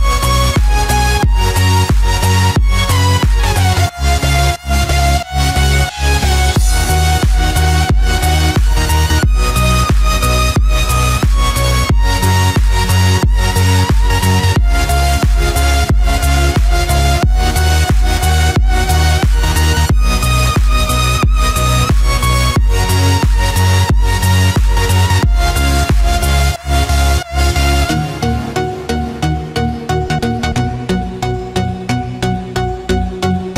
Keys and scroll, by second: 0.7 ctrl+f, 1.3 ctrl+d, 5.5 ctrl+f, 5.7 ctrl+d, 8.5 ctrl+f, 8.7 ctrl+d, 10.4 ctrl+f, 10.6 ctrl+d, 14.6 ctrl+f, 14.8 ctrl+d, 15.4 ctrl+-, 21.2 ctrl+=, 22.8 ctrl+-, 31.5 ctrl+f, 31.8 ctrl+d, 32.6 ctrl+=.